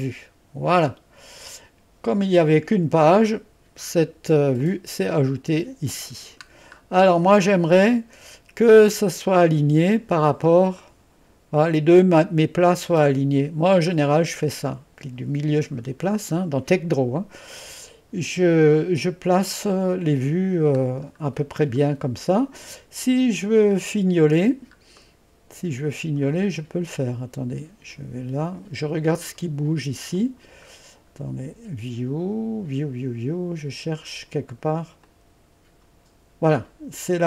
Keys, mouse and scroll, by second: 0.0 click, 0.7 drag, 4.6 click, 6.2-7.5 scroll up 1, 7.5-7.9 scroll up 1, 10.8-13.7 drag, 14.0-14.5 scroll up 1, 17.0-18.5 scroll up 1, 18.5-20.3 scroll up 1, 20.3 scroll up 1, 20.4-21.5 scroll down 1, 21.7 scroll down 1, 25.0-26.3 middle drag, 27.1-29.8 drag, 30.2 click, 30.7-31.4 scroll up 1, 35.1 click.